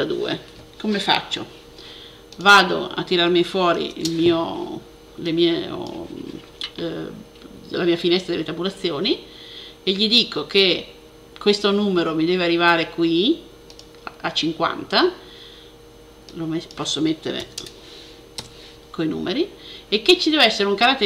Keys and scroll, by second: 0.0-0.2 typing, 3.6 shift+super+t, 17.1-17.4 typing.